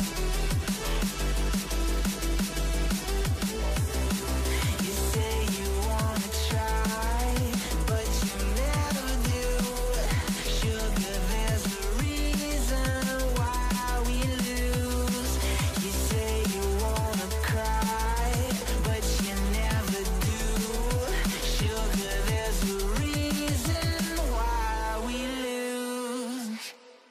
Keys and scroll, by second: 0.6-1.9 typing, 1.9 Return, 9.0-10.2 typing, 11.2-12.4 typing.